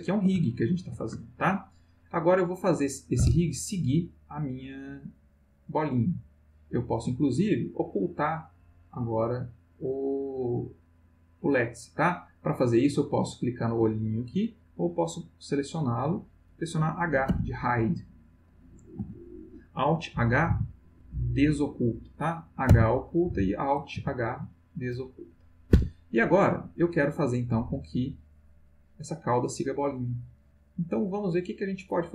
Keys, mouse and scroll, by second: 0.5-1.2 ctrl+shift+middle drag, 1.3 ctrl+shift+middle click, 6.3 click, 10.9 click, 13.8 click, 14.3 click, 15.7 click, 17.2 h, 20.5 alt+h, 22.7 h, 23.7 space, 24.0 h, 25.7 Escape, 27.8-31.2 drag.